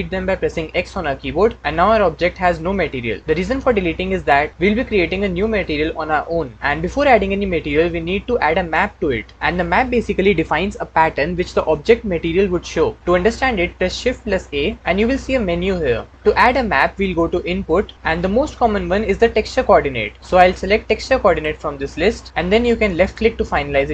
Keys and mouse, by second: 0.6 x, 14.1 shift+a.